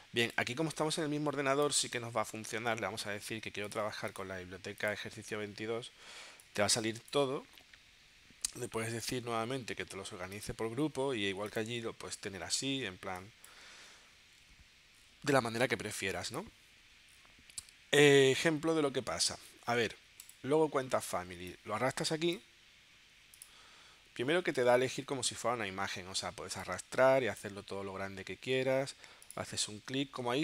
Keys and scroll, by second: 24.6 super+z, 29.0 super+z.